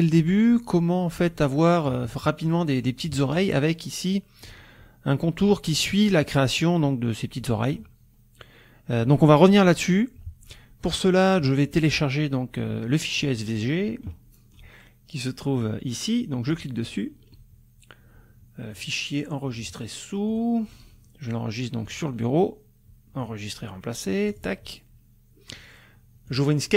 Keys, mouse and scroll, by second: 0.3 F1, 0.6-2.0 drag, 2.1 ctrl+click, 3.0 ctrl+d, 3.2 ctrl+click, 4.4 click, 12.2-12.5 scroll down 1, 12.8-13.6 scroll down 1, 14.2-14.5 scroll down 1, 16.5 click, 18.8 click, 20.3 click, 21.9 click, 23.2 click, 24.3 click, 26.3 click.